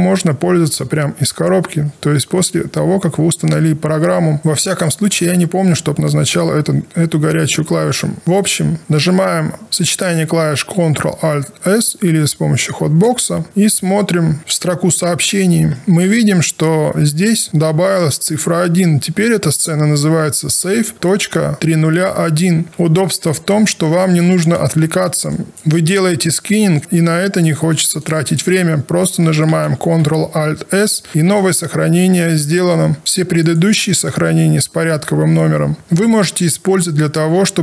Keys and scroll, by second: 29.6 ctrl+alt+s.